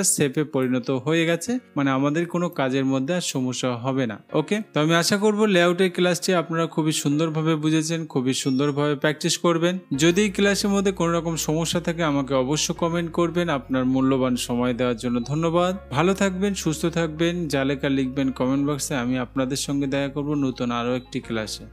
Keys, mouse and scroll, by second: 2.8-3.8 drag.